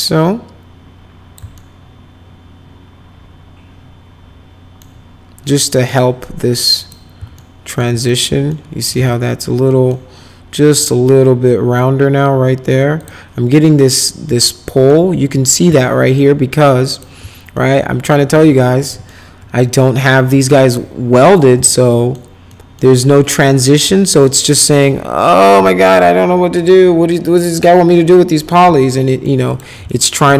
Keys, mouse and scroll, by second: 1.5-4.8 alt+middle drag, 5.8 click, 6.8 click, 7.3 alt+right click, 8.0 click, 8.5 alt+middle click, 8.9 z, 9.7 middle click, 10.7 middle click, 13.0 click, 14.4 alt+middle click, 15.7 alt+middle click, 16.8 click, 17.5 alt+middle click, 18.8 middle click, 19.3 F4, 20.6 click, 21.7 alt+middle click, 22.5 alt+middle click, 24.0 alt+middle click, 28.8 alt+middle click, 29.5 click, 29.8 alt+middle click.